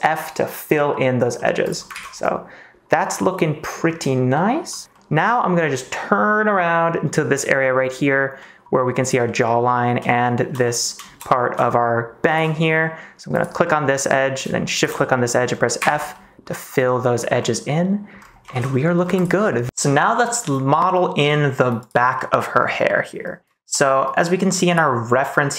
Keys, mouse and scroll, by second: 1.3 middle click, 1.9 ctrl+s, 2.1-3.6 middle drag, 4.8 ctrl+z, 4.9 middle click, 5.9-7.0 middle drag, 7.7 middle click, 8.3 middle click, 9.2 middle click, 10.6 middle click, 11.2 middle click, 12.7 middle click, 13.3 click, 13.6 middle click, 14.7 shift+click, 14.9 middle click, 15.7 f, 16.1-17.1 middle drag, 17.3 middle click, 18.4 ctrl+s, 18.6 middle click, 19.1 click, 19.4 middle click, 22.0 middle click, 22.7 middle click.